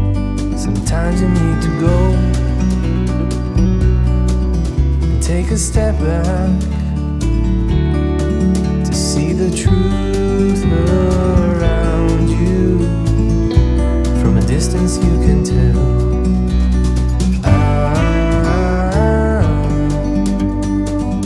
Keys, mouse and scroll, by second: 1.2 click, 3.9 alt+scroll down 1, 4.8 click, 5.6 right click, 6.0 click, 9.5 click, 11.9 click, 14.0 click, 15.9 shift+click, 16.2 right click, 16.8 click, 18.1 right click, 19.2 click, 20.4 shift+click, 20.7 right click.